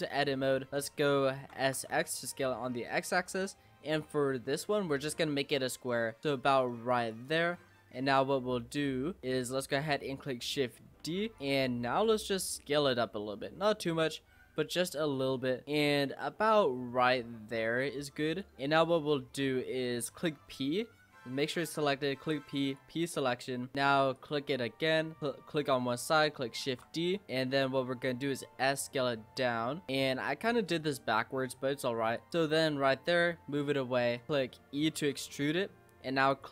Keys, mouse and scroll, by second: 0.0 Tab, 0.3-1.7 middle drag, 1.7 s, 9.2 click, 11.0 shift+d, 12.4 s, 18.7-20.5 middle drag, 20.5 p, 23.2 Tab, 23.7 click, 24.1 click, 25.2 click, 26.7 shift+d, 27.3 middle click, 27.9 s, 32.3-33.6 middle drag, 33.6 click, 34.3 e, 35.2 scroll up 1, 35.3-36.3 middle drag, 36.3 click.